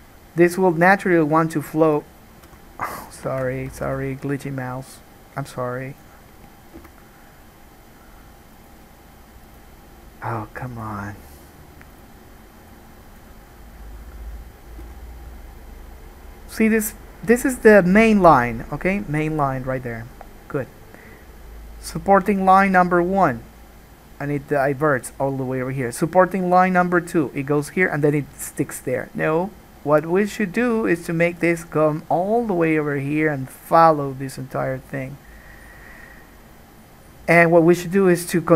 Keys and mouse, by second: 0.5-12.2 middle drag, 2.7 n, 3.5 ctrl+z, 3.9 ctrl+z, 7.0 n, 12.2-13.6 right drag, 13.6-17.6 drag, 15.0 n.